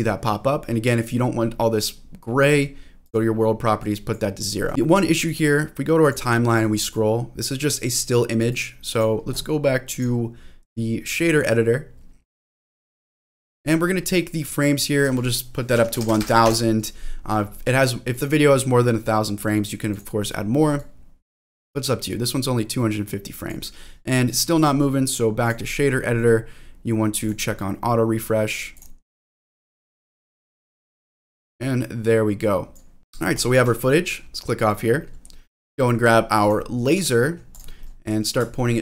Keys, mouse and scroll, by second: 3.0 click, 3.8 click, 4.7 click, 5.2 click, 6.9 click, 8.5 click, 9.9-12.9 drag, 13.5 scroll up 2, 14.2 middle click, 15.0-17.0 drag, 16.0 0, 16.2 0, 17.3 scroll down 2, 18.1-20.0 drag, 20.8-22.0 drag, 22.3-23.5 drag, 24.6 click, 26.1-27.3 scroll up 4, 27.3 click, 28.1-28.7 scroll down 2, 28.7-30.3 drag, 30.9-32.9 drag, 33.3 click, 34.1 middle click, 34.5-35.0 scroll down 2, 35.0 middle click, 35.4 scroll down 1, 35.7 middle click, 36.4 click, 36.9 g, 37.5 click, 37.8 middle click, 38.7 shift+middle click.